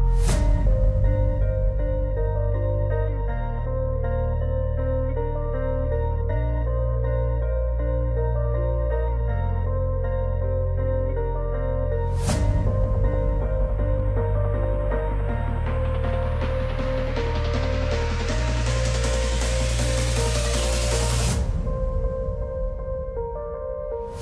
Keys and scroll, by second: 24.1 alt+w.